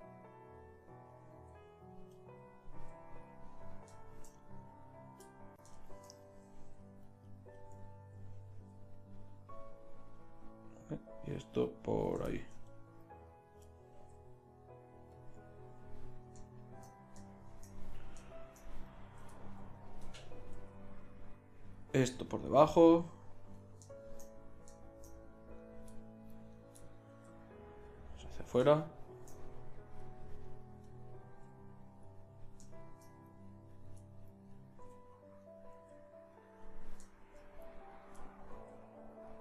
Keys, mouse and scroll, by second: 1.1 click, 1.3 g, 2.1 middle click, 2.7 g, 3.0-4.2 drag, 7.3 right click, 7.6-9.2 middle drag, 8.5 g, 11.4 right click, 12.8 middle click, 14.1 g, 20.7 g, 22.0-23.6 drag, 22.8 g, 27.3 g, 31.5 g, 35.0 g, 35.9 g, 38.5 g.